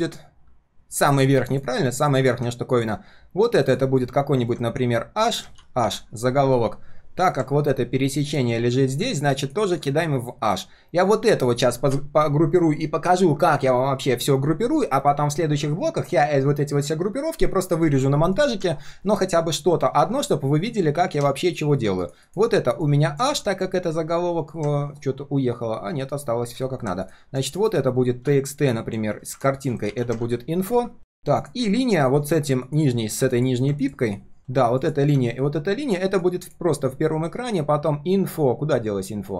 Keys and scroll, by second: 5.5 ctrl+g, 5.6 ctrl+z, 5.6 ctrl+r, 23.2 ctrl+z, 27.6 alt+l, 29.8 ctrl+g, 30.2 ctrl+r, 31.2 ctrl+s.